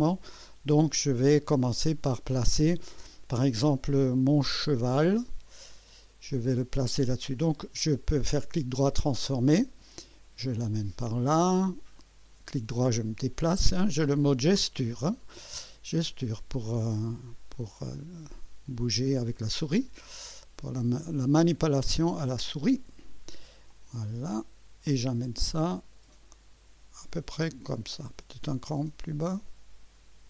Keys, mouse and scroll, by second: 5.7 click, 8.2 right click, 8.9 click, 10.5-11.9 drag, 11.9-13.6 right drag, 16.2 click, 17.5 click, 19.7-22.7 drag, 23.7-30.2 drag.